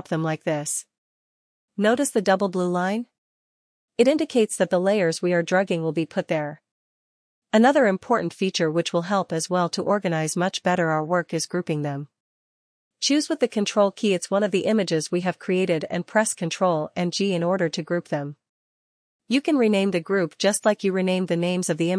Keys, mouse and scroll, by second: 4.7 click, 8.7 click, 12.3 ctrl+click, 13.9 ctrl+click, 14.0 ctrl+click, 14.2 ctrl+click, 16.3 ctrl+g, 18.4 click, 18.6 click.